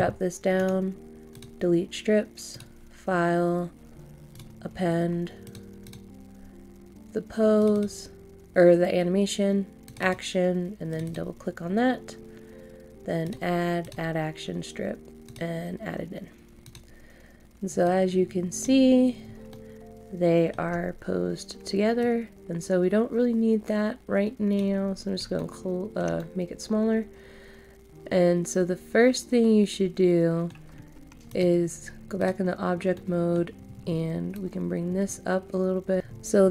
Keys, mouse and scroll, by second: 0.5 right click, 1.3-19.0 drag, 19.0 scroll down 1, 19.5 middle click, 22.0-24.8 drag, 24.8 scroll down 1, 25.3 shift+middle click, 26.1 middle click, 31.2 click, 32.9 middle click, 34.3-36.0 drag, 36.0-36.5 scroll down 1.